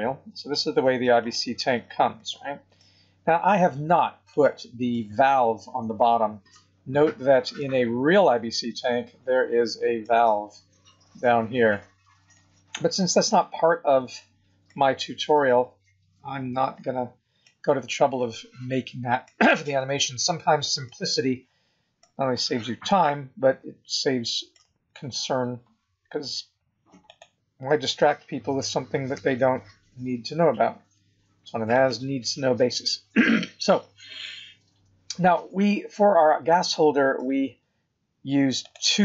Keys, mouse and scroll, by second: 1.6 scroll down 3, 2.2 middle click, 3.0 scroll up 3, 4.3 click, 4.9 middle click, 6.6 scroll down 6, 7.5 middle click, 10.3 scroll up 2, 11.2 scroll up 1, 11.6 scroll down 1, 12.3 middle click, 14.9-15.3 scroll down 5, 15.7 scroll up 4, 17.4 middle click, 20.0 shift+middle click, 20.8 middle click, 22.2-22.5 scroll up 3, 23.0 middle click, 27.0 click, 28.6 g, 32.6 scroll down 1, 35.0 scroll down 1, 35.9 middle click, 38.6 click.